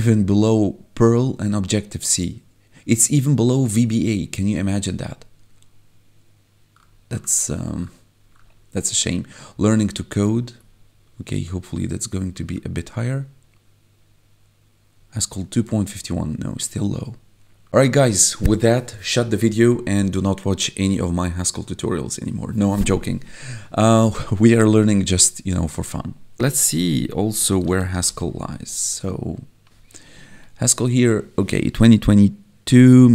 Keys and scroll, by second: 26.9 ctrl+f, 27.1-28.3 typing, 28.4 Return, 30.1 Escape.